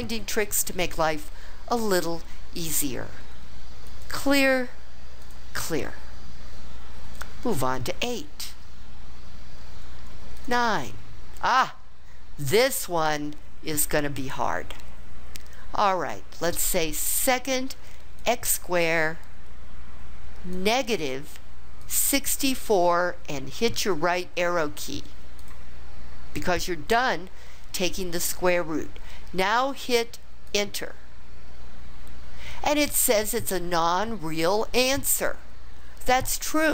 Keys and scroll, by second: 21.8 6, 22.6 4, 25.4 Right, 30.5 Return.